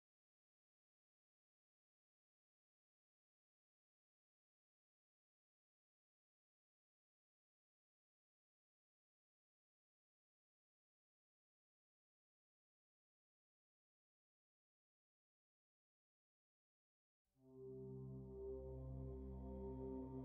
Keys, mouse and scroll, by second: 1.7-3.4 drag, 4.6 click, 5.8-7.3 drag, 10.6 s, 18.2 g.